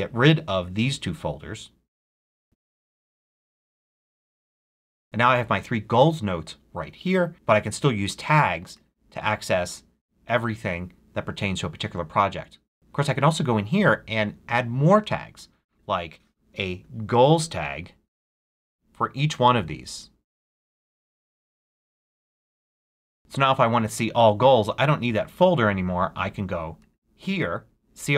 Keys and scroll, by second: 16.7-18.6 typing, 21.1-22.9 typing.